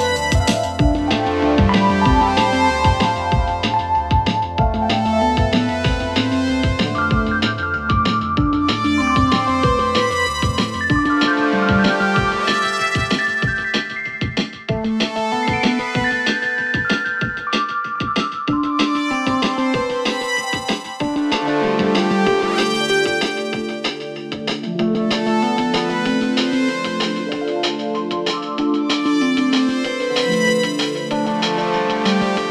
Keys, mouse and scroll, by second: 5.4 alt+[, 6.0-8.1 click, 10.5-18.4 click, 21.2 click, 22.0 Return, 23.9 click, 25.6 [, 26.0-29.6 click, 31.7 click.